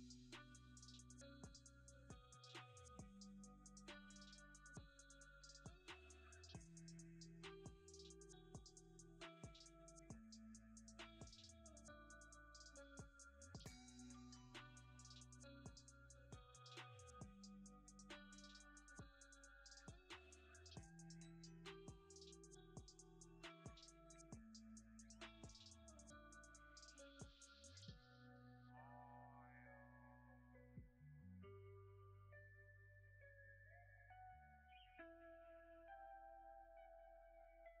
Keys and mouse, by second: 1.0-2.6 drag, 3.1 middle click, 3.7 shift+middle drag, 4.1 middle click, 4.6 shift+middle click, 5.0 middle click, 5.6 shift+middle click, 6.3 click, 6.6 Tab, 7.0 b, 7.9 click, 8.0 middle click, 8.1 click, 9.1 2, 9.7 alt+click, 12.0 u, 18.5 shift+middle click, 19.1 shift+middle click, 21.3 shift+middle click, 22.8 shift+middle click, 23.3 shift+middle click, 25.7 u, 27.1 3, 27.8 l, 29.4 click, 30.0 click, 30.5 click, 30.9 middle click, 31.6 shift+middle click, 35.2-36.8 drag, 37.2 click.